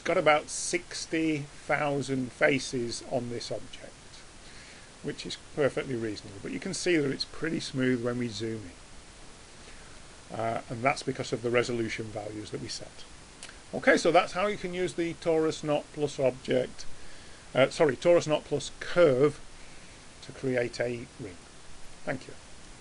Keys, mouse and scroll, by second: 2.6-5.3 middle drag, 6.7-7.7 scroll up 2, 7.3 middle click, 7.7-22.8 middle drag.